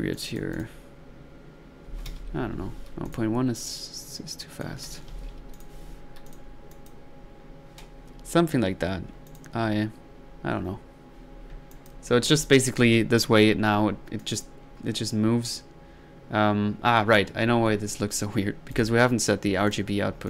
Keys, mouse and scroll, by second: 0.1 click, 2.2 ctrl+z, 3.1 ctrl+click, 3.6 ctrl+drag, 6.3 click, 6.7-7.3 drag, 11.7-12.1 drag, 12.3 1, 14.2-14.8 drag, 15.0 drag, 18.7 drag, 19.7 click.